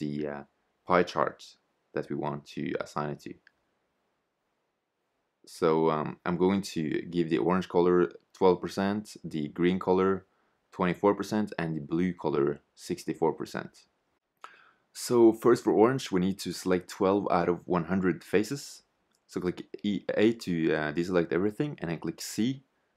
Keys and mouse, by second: 2.8-4.9 drag, 6.9-8.8 drag, 15.2-17.1 drag, 18.1 a, 19.6 click.